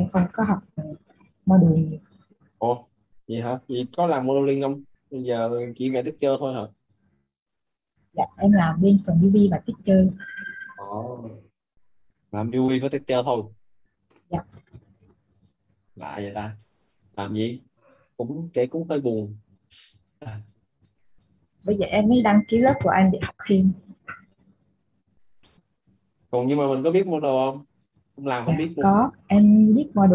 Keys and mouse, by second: 15.7 click, 21.8 Left, 22.6-28.0 typing, 29.5 Down.